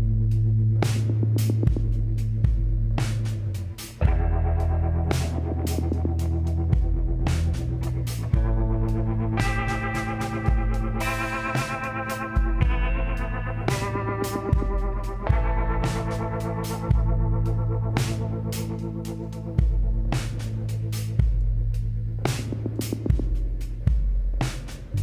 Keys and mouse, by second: 2.0 middle click, 3.6-5.4 drag, 4.9 middle click, 7.0-9.0 drag, 8.0 l, 8.6 middle click, 9.4 KP_1, 10.7 shift+d, 14.6-18.0 drag, 16.6 s, 19.0-20.9 drag, 20.5 g, 22.5-24.5 drag.